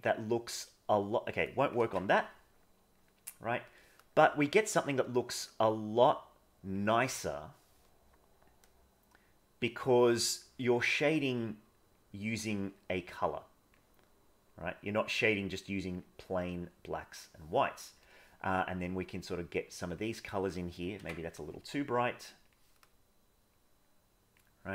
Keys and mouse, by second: 0.3 click, 1.8 ctrl+z, 5.3-6.7 drag, 8.6-9.9 drag, 10.5 middle click, 11.9-13.7 drag, 14.4-15.9 drag, 16.6 click, 19.1 click, 21.0 ctrl+z, 23.6 click.